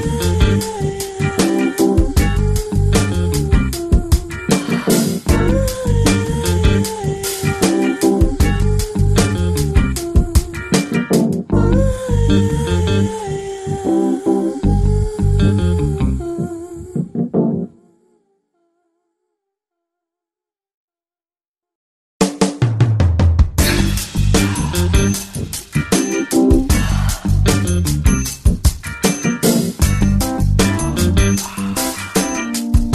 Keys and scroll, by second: 0.8 space, 12.4 space, 29.5 space, 30.1 space, 30.6 space, 31.7 Up, 31.8 Up.